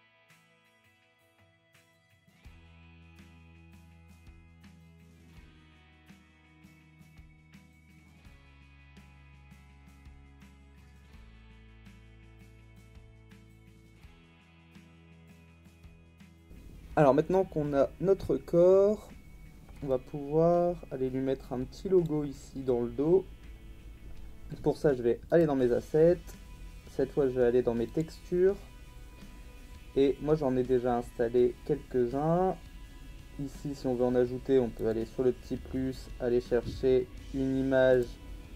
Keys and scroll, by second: 2.2 ctrl+z.